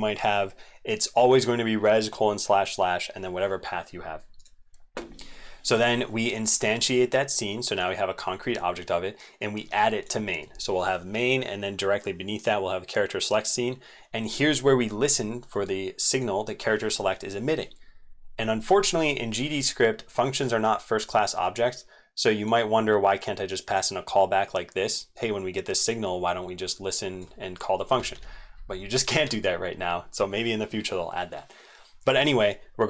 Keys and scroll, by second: 28.1 ctrl+z, 28.5 ctrl+z.